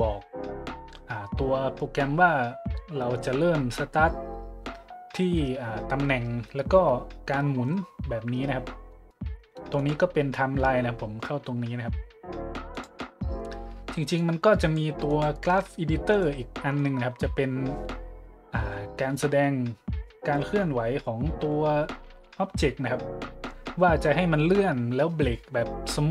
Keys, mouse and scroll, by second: 9.8 click, 12.7 click, 14.2 click, 15.0 click, 16.1-16.5 drag, 16.7 middle click, 16.9 middle click, 17.3 middle click, 17.6 middle click, 19.0 middle click.